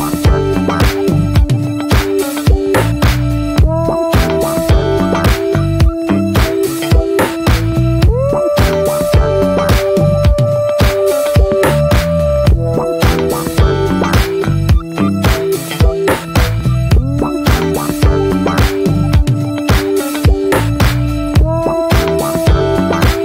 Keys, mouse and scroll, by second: 0.2-1.1 middle drag, 1.1 scroll up 1, 1.3 click, 1.7-4.0 middle drag, 4.0 click, 5.0 click, 6.0 Tab, 6.9 ctrl+a, 8.3-9.3 scroll down 2, 9.3-13.3 drag, 18.9-21.8 middle drag, 21.8 Tab, 22.1 click, 22.5 middle click, 23.1 scroll up 1.